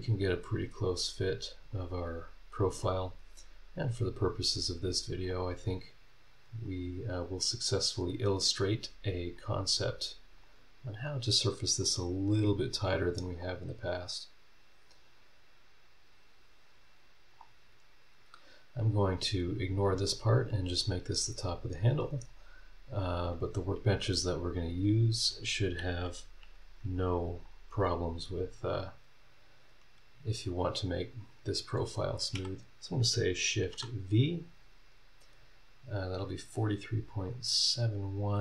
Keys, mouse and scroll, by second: 0.0-0.4 scroll up 1, 1.7-2.8 drag, 4.3-5.4 drag, 6.6-7.8 drag, 7.9 scroll down 1, 8.4-8.7 scroll up 3, 9.4-10.5 drag, 11.8-13.5 drag, 14.7-17.5 drag, 17.6 scroll down 2, 18.0-18.3 scroll up 2, 18.7 scroll down 1, 22.3 click, 22.6 scroll down 1, 23.1 scroll up 1, 27.4-28.6 drag, 33.6 shift+v, 37.3 click.